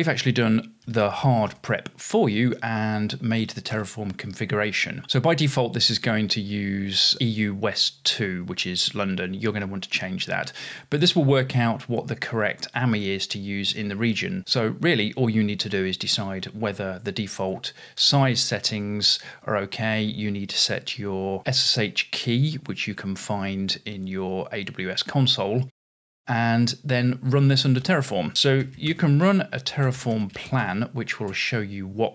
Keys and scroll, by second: 0.0-2.0 typing, 3.5-4.3 typing, 17.5 Return, 17.8-18.6 typing, 27.0-31.8 typing.